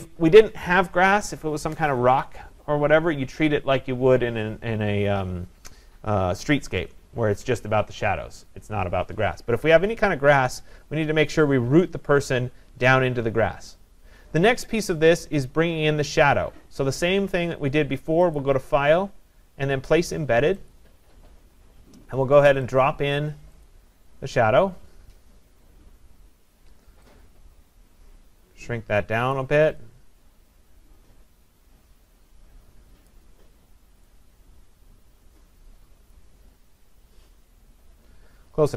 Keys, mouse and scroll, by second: 18.4 click, 20.7 click, 22.7 click, 23.7 click, 29.3 click, 33.0 click, 36.1 click.